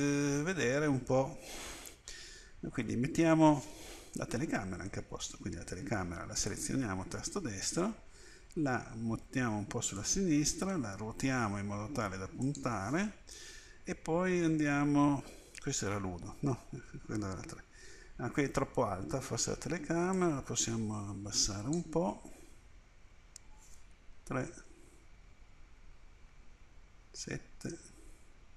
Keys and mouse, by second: 4.3 KP_7, 8.2 g, 10.9 r, 15.8 KP_1, 20.1-23.4 drag, 24.2 KP_3, 27.1 KP_7.